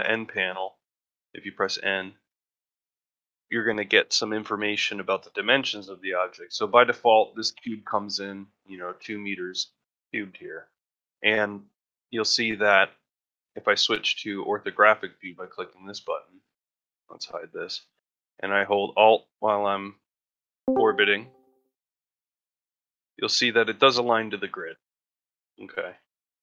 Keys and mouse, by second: 11.9-13.1 shift+middle drag, 13.3-16.4 middle drag, 17.7-22.0 middle drag, 22.3-22.6 shift+middle drag, 22.9 ctrl+middle drag, 23.3 shift+middle drag, 24.5-25.8 ctrl+middle drag, 26.0 shift+middle click.